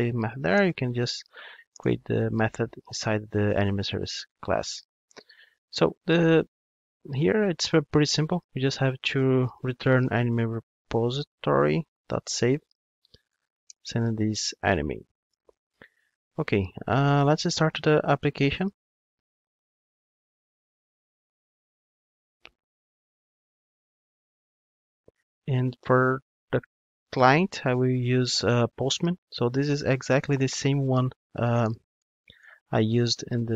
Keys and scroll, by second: 10.3 Return, 15.5 alt+super+l, 18.8 ctrl+d.